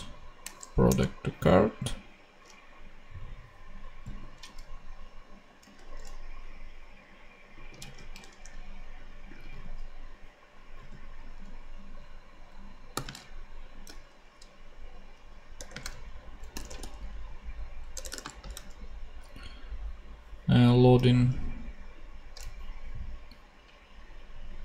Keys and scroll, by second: 0.8 shift+Return, 1.4 Return, 5.7 ctrl+Tab, 7.8 super+c, 9.0 ctrl+Tab, 10.7 super+v, 13.8 shift+space, 15.5-18.2 typing, 18.0 shift+Return.